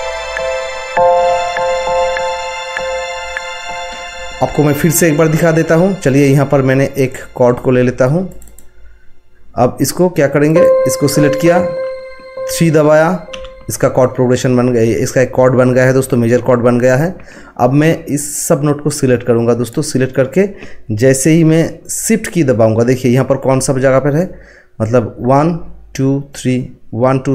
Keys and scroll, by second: 13.3 3.